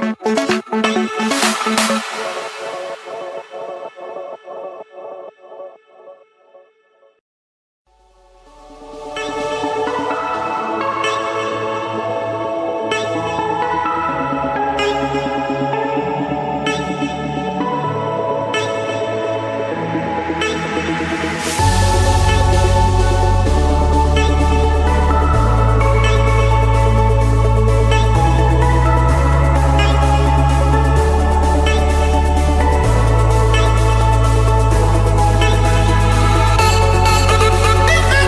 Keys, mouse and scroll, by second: 0.6-1.3 typing, 3.4-4.5 drag, 5.2-6.3 drag, 6.7 d, 7.1 Return, 8.2 4, 8.6 Return, 9.3 4, 9.7 Return, 11.0 KP_4, 11.8 Escape, 14.1 click, 15.8-16.9 drag, 17.5 Escape, 19.6-20.7 drag, 24.4-26.4 typing, 25.5 Return, 26.7 Escape, 29.0-30.1 drag, 31.3 click, 31.7-33.0 scroll, 34.5 click, 34.8 scroll, 36.3 click, 36.5-37.3 scroll, 37.5-38.2 scroll.